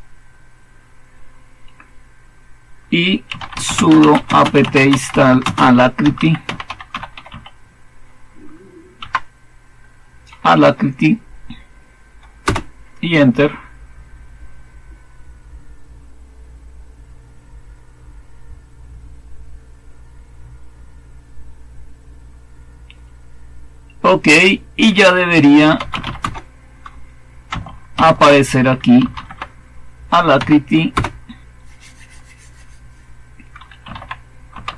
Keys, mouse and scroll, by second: 3.0-7.7 typing, 8.9 Tab, 12.3 Return, 25.2-26.4 typing, 27.8 alt+super+d, 28.7-29.6 typing, 30.3 Down, 30.8 Return, 33.5-34.7 typing.